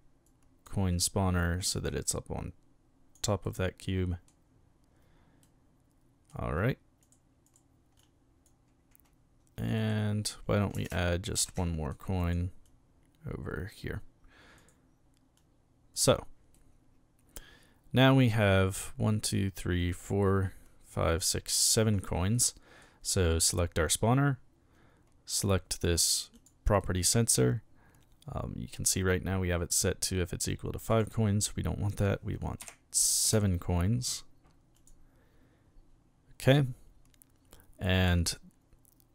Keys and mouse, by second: 0.2 click, 1.0 click, 1.9-3.1 drag, 3.4-4.2 middle drag, 5.4-6.3 middle drag, 7.0 right click, 7.4 right click, 8.0-8.5 drag, 9.8 right click, 11.4 shift+d, 11.5-11.9 shift+middle drag, 12.2 click, 12.6-13.7 drag, 14.6 right click, 15.4 click, 16.5-18.3 middle drag, 22.3-22.8 middle drag, 23.4 right click, 26.3 click, 26.8 middle click, 30.9 click, 32.6 KP_7, 33.2 KP_Enter, 34.8 click.